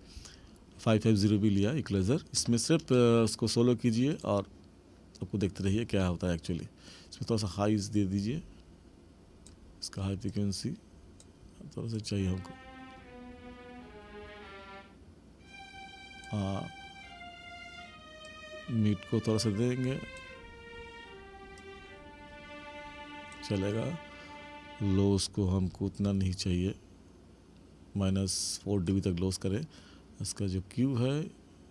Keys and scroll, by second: 5.7 space.